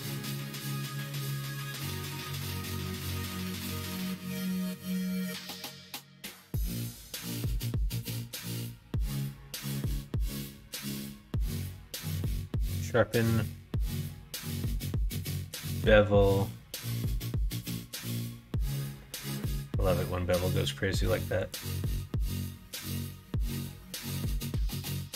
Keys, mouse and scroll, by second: 1.6 2, 2.2 alt+click, 2.9 alt+click, 4.2 s, 6.9 middle click, 7.6 middle click, 8.3 middle click, 9.6 Tab, 10.5 click, 11.2 click, 11.8 q, 13.1 middle click, 13.7 q, 23.9-25.1 drag.